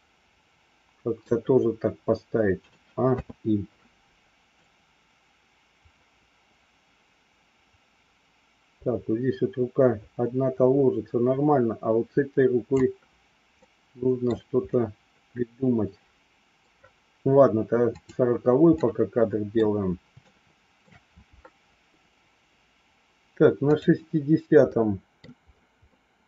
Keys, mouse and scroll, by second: 0.2 middle click, 1.2 scroll down 1, 2.5 a, 3.0 i, 4.5-12.7 drag, 13.5 middle click, 17.9 click, 18.8 middle click, 20.1 shift+middle click, 23.6 click, 24.6 middle click, 25.9-26.2 middle drag.